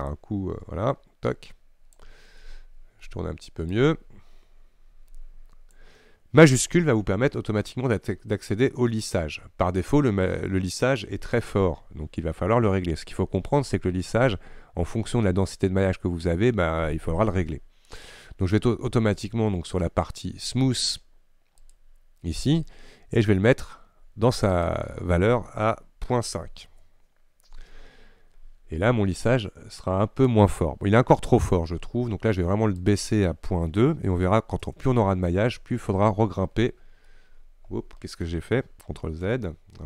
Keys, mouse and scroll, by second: 2.5-3.8 middle drag, 3.8-11.0 drag, 11.0 ctrl+z, 21.8-31.6 drag, 31.6 ctrl+r, 34.7-37.2 drag, 37.2-39.3 middle drag, 39.3 ctrl+z.